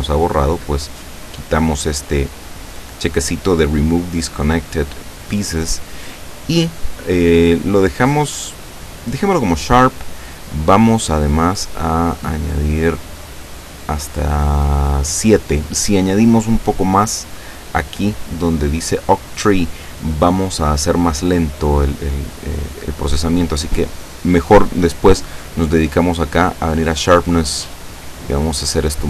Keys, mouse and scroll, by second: 2.4 click, 8.0 click, 11.6 click, 12.1 click, 13.1 click, 27.1-29.0 drag.